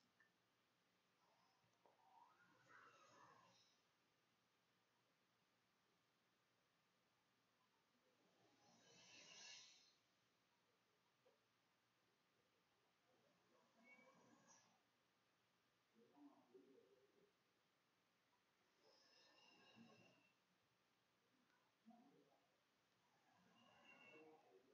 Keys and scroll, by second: 0.3 ], 4.1-10.6 typing, 11.8 BackSpace, 21.0-22.9 typing, 24.2 r.